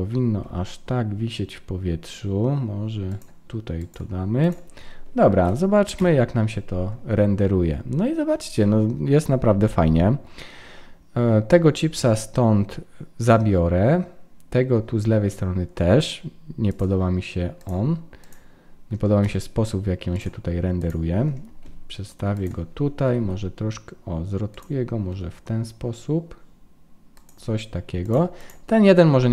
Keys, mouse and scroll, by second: 0.4 g, 3.8 click, 5.3 ctrl+s, 6.1 F12, 17.6 click, 19.2 click, 19.2 g, 20.8 click, 21.6 g, 23.0 r, 25.1 g, 28.0 click.